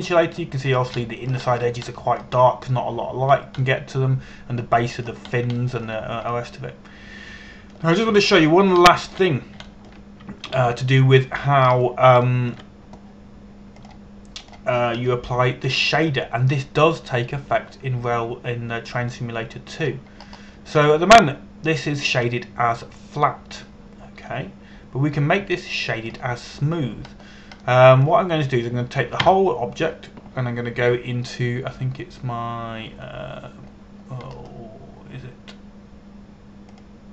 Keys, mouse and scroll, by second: 0.2 scroll down 1, 0.6 middle click, 1.1 shift+middle click, 2.4 scroll up 1, 2.6 shift+middle click, 3.1-3.6 scroll up 1, 3.6 middle click, 5.0 scroll down 1, 5.3 middle click, 6.9 scroll down 1, 7.2 shift+middle click, 7.5-8.0 shift+scroll down 2, 8.0 middle click, 9.8 Tab, 10.6 shift+middle click, 11.4 shift+middle click, 12.2 ctrl+KP_1, 13.3 scroll up 1, 14.0 shift+middle click, 15.5 click, 16.7 middle click, 20.8 click, 21.9-22.5 scroll up 1, 22.5 middle click, 30.9 Tab, 35.3-36.0 scroll down 1, 36.0-36.5 scroll up 1.